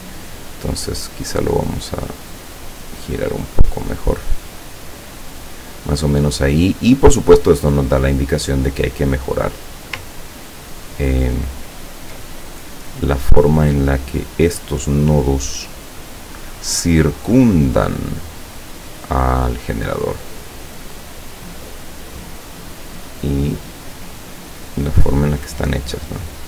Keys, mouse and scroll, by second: 0.8 click, 1.5-4.2 drag, 4.5-6.0 drag, 7.8 click, 8.5-9.3 scroll up 1, 9.3-9.8 scroll down 2, 10.2-10.7 ctrl+scroll up 2, 10.9 ctrl+scroll down 2, 11.5-11.9 ctrl+scroll up 2, 12.0 ctrl+scroll up 2, 13.6-16.7 drag, 17.4-19.5 drag, 21.0-22.8 drag, 23.3 click, 24.4-26.1 drag.